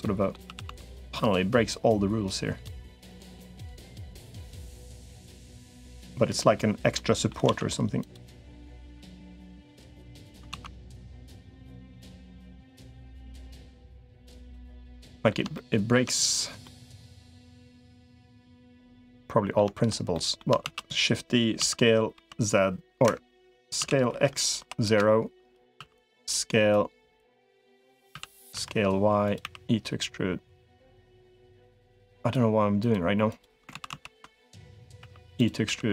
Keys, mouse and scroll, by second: 0.4 s, 1.6 click, 2.6 middle click, 3.2 click, 4.0-6.0 drag, 6.1 middle click, 6.7 middle click, 7.2 alt+z, 7.8 click, 8.4 click, 8.6 3, 10.4 alt+z, 11.2-12.8 drag, 13.2-14.4 drag, 14.5 middle click, 15.3 shift+middle click, 16.4 middle click, 18.3 middle click, 18.9 middle click, 19.9 middle click, 20.4 shift+d, 21.4 s, 23.6 s, 25.6 s, 26.6 click, 28.0 s, 29.2 e, 31.8 click, 32.6 click, 33.6 ctrl+z, 33.8 ctrl+z, 34.2 click, 34.8 e, 35.4 s.